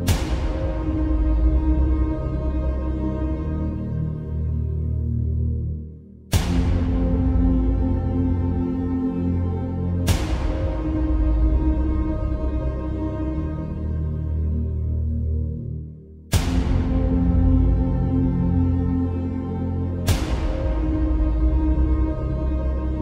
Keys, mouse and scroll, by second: 18.3-18.9 alt+scroll down 1, 19.3-19.9 shift+drag.